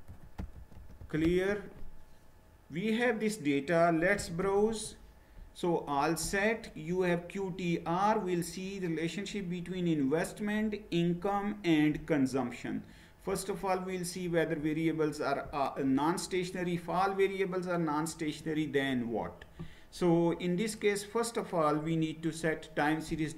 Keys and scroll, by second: 0.0-1.7 typing, 3.9-4.7 typing, 4.7 Return.